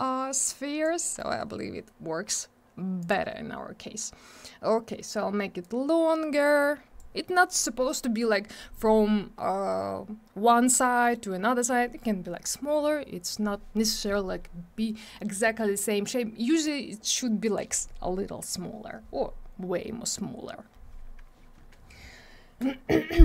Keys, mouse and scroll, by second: 1.0 middle click, 1.3 scroll up 1, 3.0 click, 5.6 click, 8.8 scroll up 1, 10.8 scroll down 1, 11.0 middle click.